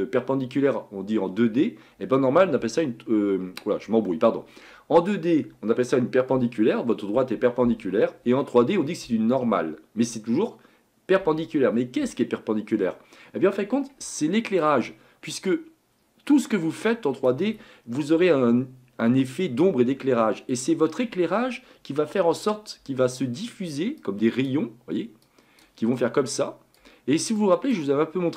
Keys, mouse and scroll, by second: 14.6-17.7 ctrl+drag, 24.0-28.3 drag.